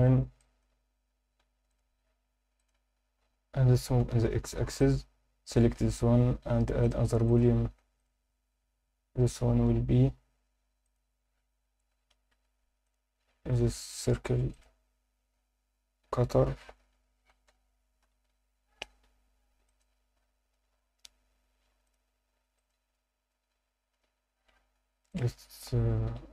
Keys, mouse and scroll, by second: 0.4 alt+shift+middle click, 1.4 ctrl+r, 2.6 click, 2.7 Tab, 2.9-3.7 scroll down 2, 3.7 g, 4.0 x, 4.8 click, 5.1-5.6 scroll down 2, 5.4 click, 6.8 click, 7.2-8.3 drag, 10.8-12.3 drag, 12.8 click, 14.5 click, 16.0 F2, 19.7 click, 21.8 click, 25.1 click.